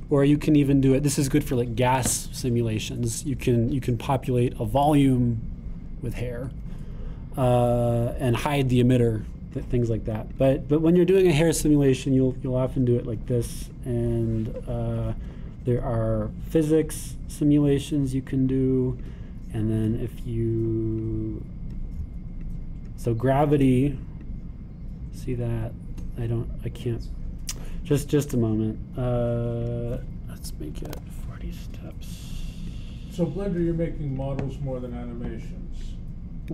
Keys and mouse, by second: 17.4-33.9 drag, 35.1-36.5 drag.